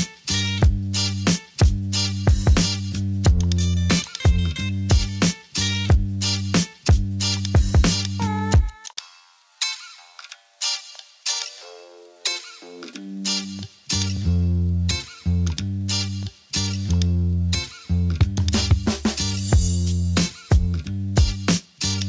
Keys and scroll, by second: 6.1 super+t, 9.4 Return, 10.2 super+j, 12.8 super+t, 19.6 Return, 20.6 super+j.